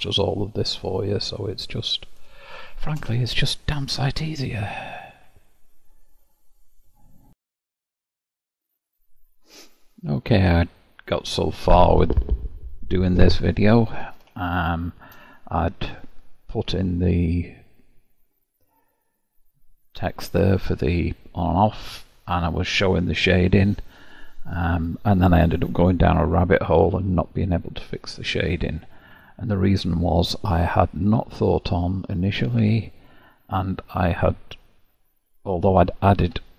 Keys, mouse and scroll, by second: 1.1-1.9 middle drag, 1.9-2.5 scroll up 5, 2.5-3.4 shift+middle drag, 3.4 click, 4.7 q, 14.4-15.2 shift+middle drag, 15.2-16.2 scroll up 1, 16.2-18.4 scroll up 1, 19.2 click, 19.6 click, 33.6 click, 36.2 Tab.